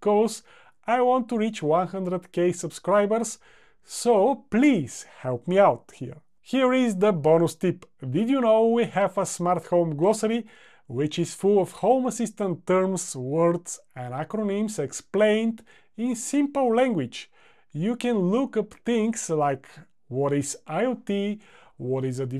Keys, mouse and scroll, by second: 20.0-20.4 drag.